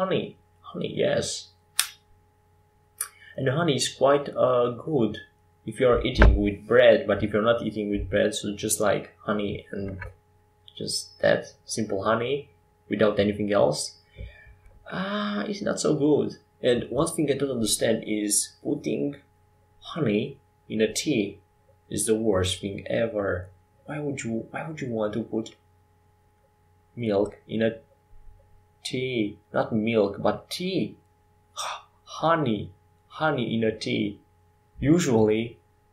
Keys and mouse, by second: 16.5-20.1 middle drag, 20.1 ctrl+r, 20.9 middle click, 22.9 Tab, 24.0 ctrl+r, 28.6 ctrl+r, 32.0 ctrl+r.